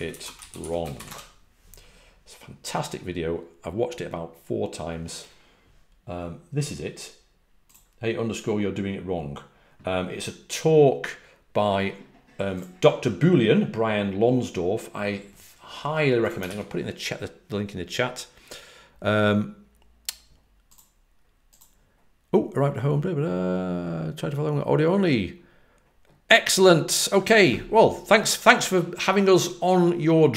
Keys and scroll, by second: 0.0-1.4 typing, 16.4 super+c.